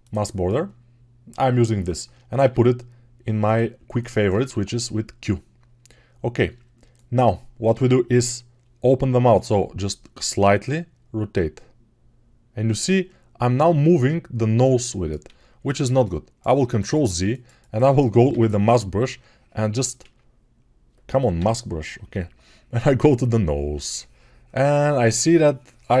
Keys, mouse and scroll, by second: 0.0-3.4 drag, 3.4-16.8 middle drag, 4.4 q, 9.2-26.0 drag, 15.5 ctrl+alt+z, 18.4 m, 20.2 ctrl+z, 21.4 m.